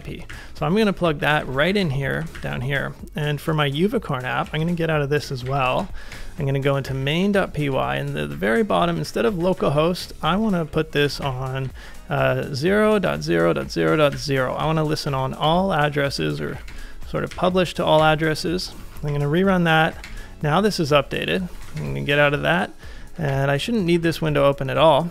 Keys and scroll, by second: 0.0-1.5 typing, 1.6 ctrl+;, 2.3 ctrl+a, 3.6 ctrl+c, 4.2-16.9 typing, 17.4 Up, 18.0 Return, 18.8 ctrl+a, 19.1-22.0 typing, 23.1 ctrl+a, 24.0-24.7 typing, 24.9 ctrl+c.